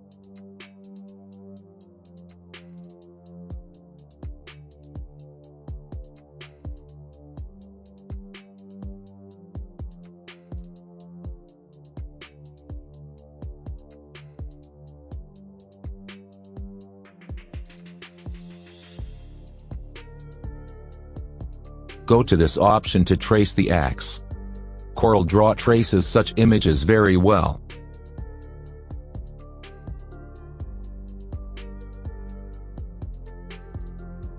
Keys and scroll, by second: 6.7 KP_Add.